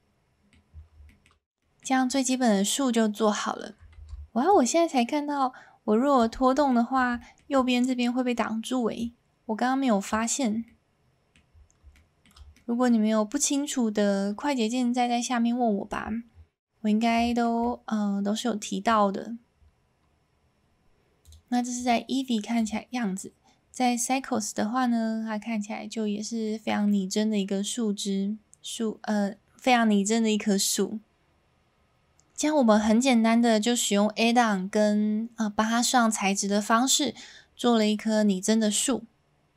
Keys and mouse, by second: 0.9 s, 1.0 middle drag, 1.6 middle click, 3.9 alt+a, 4.5-6.2 drag, 6.7-7.0 middle drag, 7.2 shift+middle drag, 9.0-10.1 drag, 10.7-11.4 middle drag, 11.9-12.3 shift+middle drag, 12.5-12.8 middle drag, 15.9-17.0 middle drag, 17.3 shift+middle click, 17.6-18.6 middle drag, 21.2 click, 21.8-22.7 drag.